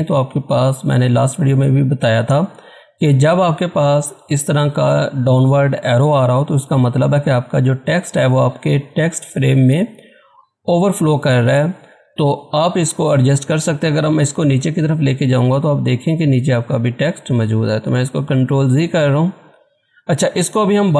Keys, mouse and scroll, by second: 1.2 scroll up 1, 3.4 typing, 8.0 scroll down 1, 12.5-13.3 scroll down 1, 14.7-18.2 drag, 18.2 ctrl+z.